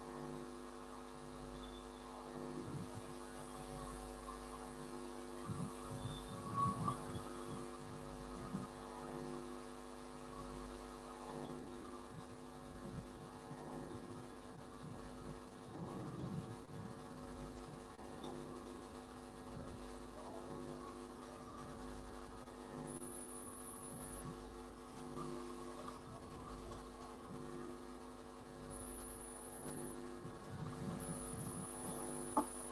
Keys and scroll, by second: 6.8-8.3 typing.